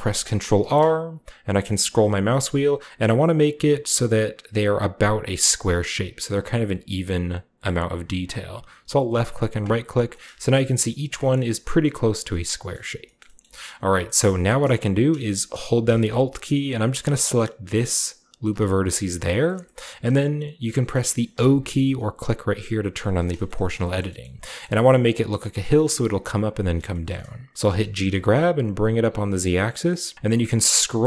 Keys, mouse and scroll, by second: 0.6 ctrl+r, 1.7-2.3 scroll up 2, 3.0-4.8 scroll up 1, 5.2 scroll down 1, 5.2 scroll up 1, 5.8-6.6 scroll down 1, 6.6-7.8 scroll down 1, 9.1-10.1 drag, 9.6-11.1 middle drag, 10.8-11.9 scroll up 1, 11.4 shift+middle click, 11.9 scroll down 1, 12.8 middle click, 12.9-23.5 scroll down 1, 23.5 shift+click, 23.5 shift+o, 23.6-26.1 scroll up 1, 26.9-28.5 shift+middle drag, 27.6 g, 28.1 z, 30.1 scroll down 2, 30.2 scroll up 1, 30.4 scroll down 1, 30.5 scroll up 1, 30.8 scroll down 1, 30.9 scroll up 1.